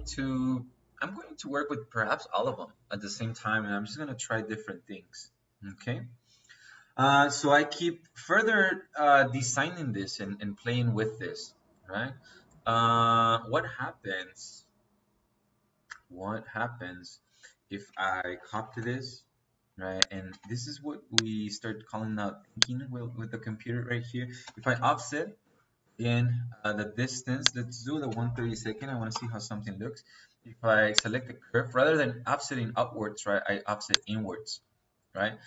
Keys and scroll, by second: 18.1-18.8 typing, 20.2 space, 22.8 Escape, 23.7 Escape, 24.3 o, 24.6 f, 25.3 Return, 28.0 1, 28.3 /, 29.0 2, 29.1 Return.